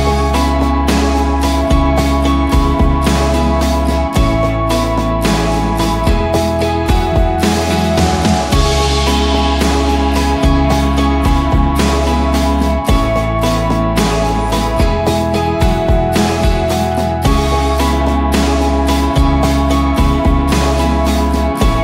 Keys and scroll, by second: 1.1-3.2 typing, 5.4-6.1 typing, 10.0 ctrl+d, 11.2 Up, 11.4 Up, 12.8 ctrl+j, 13.3 ctrl+[, 15.3-17.7 typing, 18.1 Left, 18.4 Left, 18.5 Left, 18.7 Left, 19.5 Return.